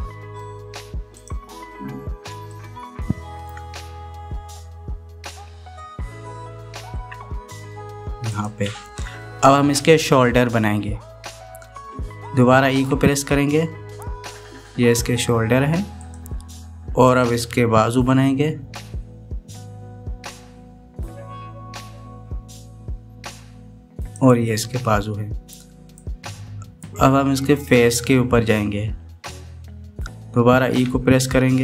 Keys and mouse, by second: 3.3-4.3 shift+middle drag, 6.0 g, 13.7 e, 17.9 e, 27.0 right click, 31.5 e.